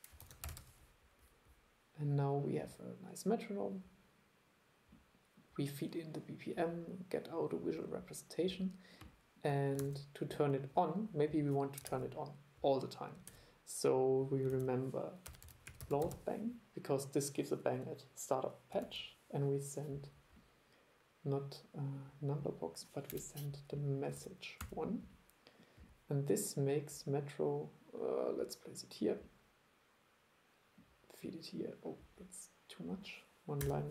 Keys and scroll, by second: 9.9 super+e, 11.9 super+e, 13.4 super+e, 14.6 super+1, 18.9 super+1, 24.2 super+2.